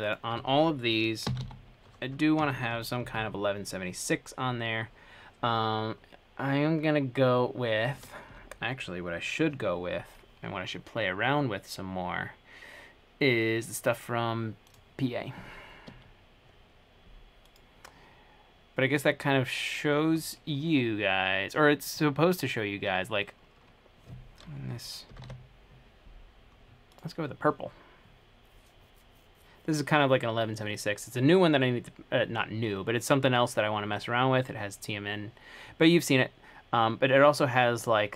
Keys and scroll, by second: 1.2-3.9 typing, 8.0-8.4 typing, 16.1 Escape, 25.1-25.9 typing, 27.8 typing.